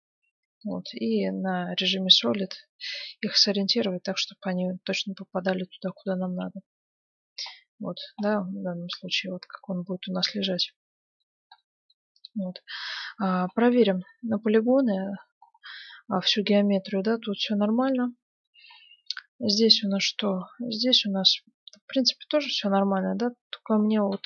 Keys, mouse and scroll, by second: 0.8 z, 2.3 g, 6.2 Tab, 6.8 z, 7.6-10.6 middle drag, 11.7-17.2 middle drag, 14.0 Tab, 17.6 Tab, 19.1-20.8 right drag, 19.9 Tab, 21.9-23.6 right drag, 22.7 KP_Decimal, 23.9-24.2 scroll down 1.